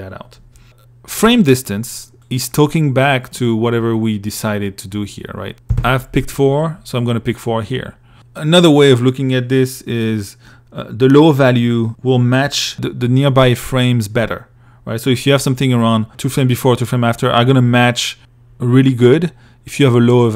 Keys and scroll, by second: 4.9 4, 5.0 Page_Up.